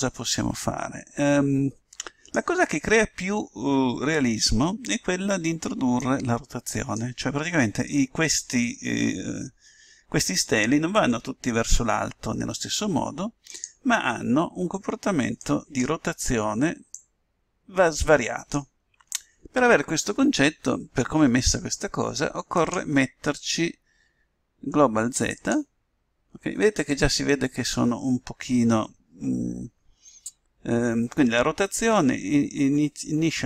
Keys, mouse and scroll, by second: 6.9-8.3 drag, 14.5-16.1 drag, 16.4-19.5 drag, 23.5-25.1 drag.